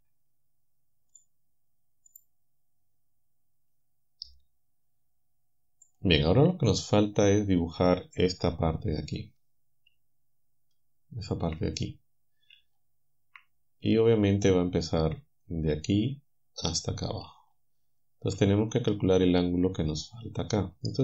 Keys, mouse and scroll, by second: 1.2 click, 2.1 click, 5.9 click.